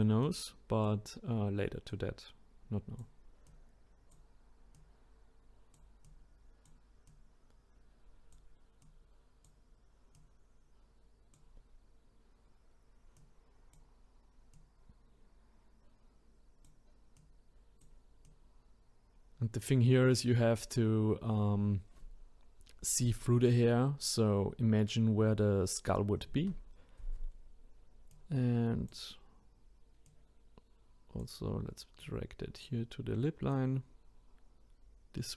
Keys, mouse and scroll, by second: 0.2 click, 1.9 click, 3.4 click, 4.7 click, 6.1 click, 7.1 click, 8.8-10.3 drag, 13.1 click, 14.6 click, 17.2-21.2 drag, 28.1 click, 30.1 click, 32.0-33.6 drag.